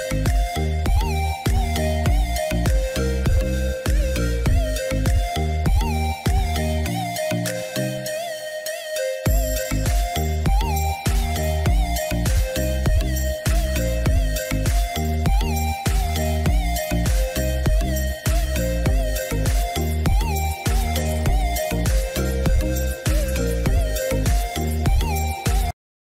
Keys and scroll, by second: 3.3 ctrl+=, 6.8 ctrl+-.